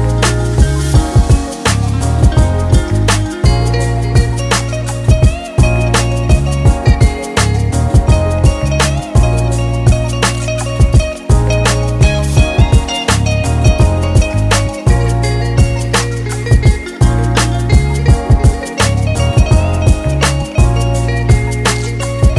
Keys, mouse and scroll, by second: 1.8 click, 2.8 shift+middle click, 3.7 shift+middle click, 4.4 click, 7.5 s, 9.2 click, 10.4 s, 11.7-12.1 scroll up 3, 13.3 click, 13.3 scroll up 3, 15.0 KP_7, 15.4-16.0 scroll down 1, 16.5-17.0 scroll down 1, 17.5 shift+middle click, 18.7 click, 20.0 shift+a.